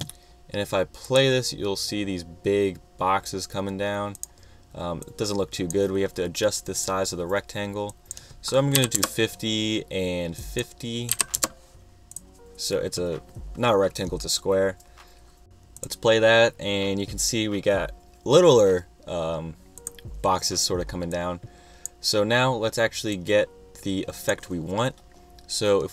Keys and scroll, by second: 8.5-9.4 typing, 10.8-11.8 typing.